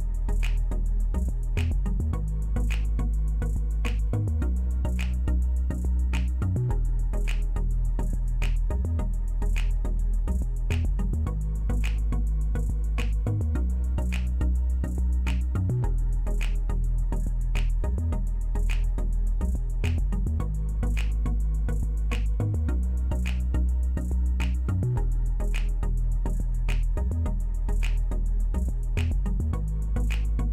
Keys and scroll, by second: 0.5-2.7 typing, 10.5-11.2 typing, 18.9 w.